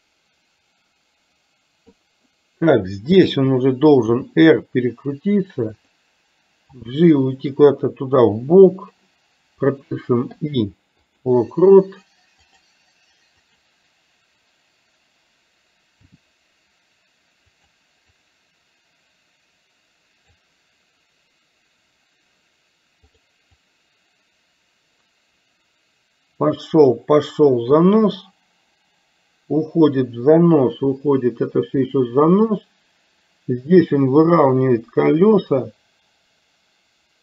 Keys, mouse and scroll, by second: 4.3 r, 6.9 g, 10.4 i, 12.5 click, 13.5 click, 16.2 g, 18.3-20.5 drag, 23.7-37.2 drag.